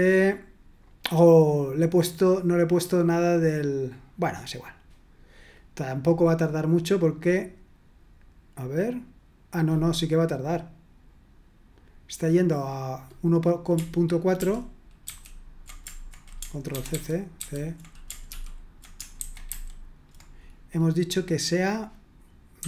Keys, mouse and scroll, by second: 14.4 ctrl+p, 15.0 ctrl+c, 16.7 ctrl+c, 18.3 ctrl+c.